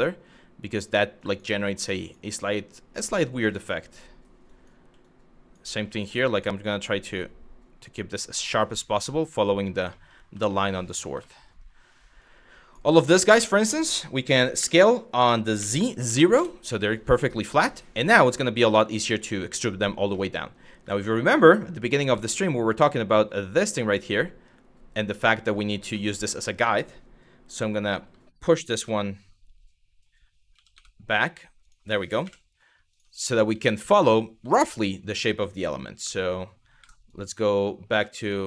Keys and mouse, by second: 0.4 click, 0.8 click, 1.1 g, 1.6 click, 3.5 click, 4.1 click, 4.4 g, 4.8 click, 5.9 click, 6.4 click, 7.7 click, 9.6 middle click, 10.2 shift+middle click, 10.9 shift+middle click, 11.8 click, 12.7 click, 14.2 s, 15.2 z, 15.7 KP_0, 16.0 KP_Enter, 17.5 click, 19.8 shift+middle click, 20.5 Tab, 20.7 click, 21.4 g, 25.0 click, 25.7-26.1 middle drag, 28.4 y, 30.2 g, 31.2 click, 31.9 KP_1, 33.3 shift+middle click, 34.2 middle click, 35.6 Tab, 36.4 1, 36.7 drag, 37.5 1, 37.8 drag, 38.1 click.